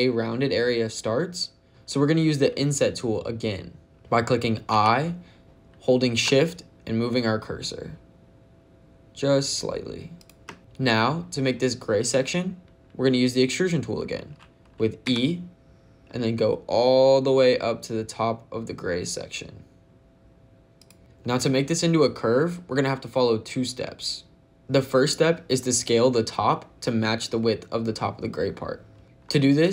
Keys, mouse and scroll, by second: 1.7 ctrl+z, 1.7 click, 1.7 i, 4.6 i, 10.0 shift+click, 14.9 e, 20.6 click, 24.6 ctrl+z.